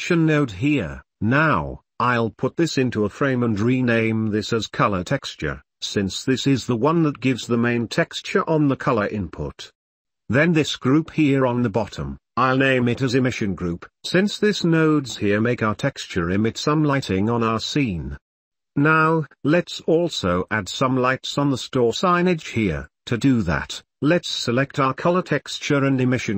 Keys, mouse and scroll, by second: 3.2 middle click, 3.4 drag, 4.8 right drag, 5.9 w, 7.1 w, 10.2 middle click, 12.1-12.5 drag, 13.4 ctrl+j, 13.9 w, 16.9 s, 18.9 click, 21.4 g, 23.7 click, 24.4 g, 25.2 click, 25.6-26.3 drag.